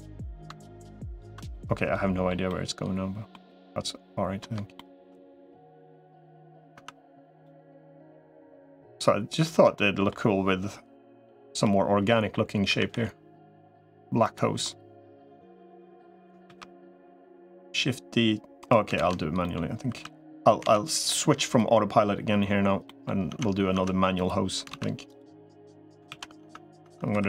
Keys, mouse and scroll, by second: 0.9 ctrl+scroll up 1, 1.4 middle click, 2.3 middle click, 3.3 middle click, 4.6 shift+middle click, 6.1 click, 6.7 Tab, 7.3-8.8 middle drag, 9.3 Tab, 9.6 middle click, 11.5 l, 12.5 a, 12.7 g, 14.4 middle click, 15.7 middle click, 16.3 shift+d, 18.9 ctrl+z, 19.2 middle click, 20.1 2, 20.5 alt+z, 21.3 click, 22.7 middle click, 23.1 Tab, 23.7 Tab, 24.5 alt+z, 24.9 click, 25.9 ctrl+s, 26.3 Tab, 26.7 Tab.